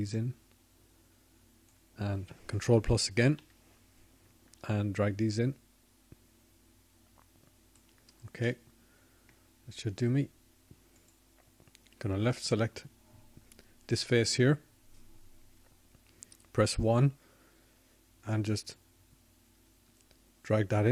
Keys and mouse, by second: 0.0 ctrl+KP_Add, 9.5 ctrl+KP_Add, 14.3 middle click, 15.4 middle click, 17.6-18.7 middle drag, 19.1-20.7 middle drag.